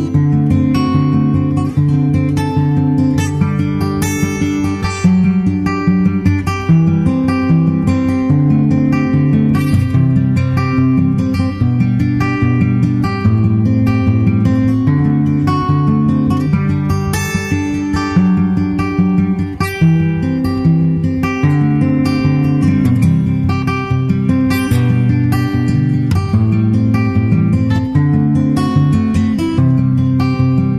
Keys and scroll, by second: 1.5 super+Right, 3.5 super+z, 3.9 super+Right, 13.9 super+Right, 27.1 super+s, 29.5 super+s.